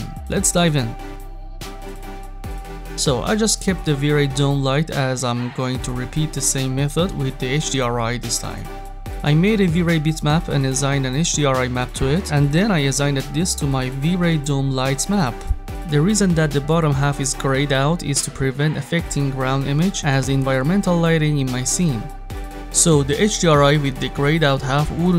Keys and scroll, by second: 9.3 m.